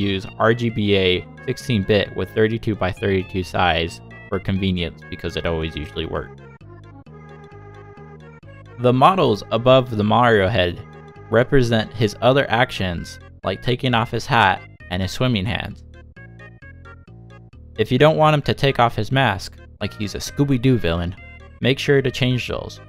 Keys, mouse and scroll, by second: 0.1 click, 3.5 click, 3.7-4.2 scroll down 4, 3.9 click, 4.0 click, 4.1 click, 4.2 click, 4.5 click, 4.7 click, 4.9 click, 5.4 click, 5.9-6.3 scroll down 4, 6.3 scroll up 1, 6.4-6.8 scroll down 4, 6.8 click, 7.1 click, 7.6 click, 7.9 click, 8.1 click, 8.5 scroll down 1, 8.6 click, 8.6 click, 8.9 click, 9.0 click, 9.2 click, 9.5 scroll down 3, 9.6-10.2 scroll up 23, 10.2 click, 10.3 click, 10.4 scroll down 1, 10.6 middle click, 12.4 shift+middle click, 12.9 middle click, 15.2-15.7 scroll down 4.